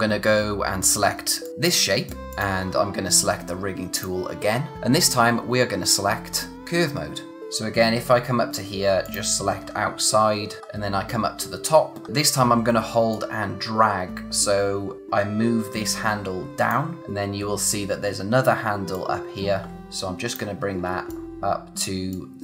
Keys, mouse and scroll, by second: 0.8 click, 6.5 click, 7.3-8.9 scroll up 1, 9.0 click, 9.5-10.6 scroll down 1, 10.6-12.0 scroll up 1, 12.0 scroll down 1, 12.1-12.7 scroll up 1, 13.1 click, 17.0-18.9 scroll up 1, 18.9 click, 19.8-20.4 scroll down 1, 20.9 space, 21.1 click, 21.2 space, 22.1 click.